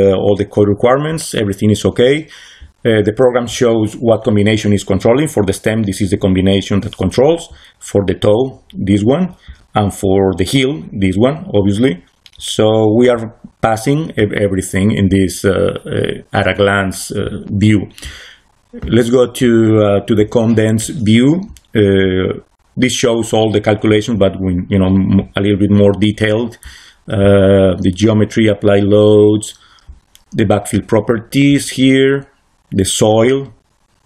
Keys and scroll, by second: 17.7 c.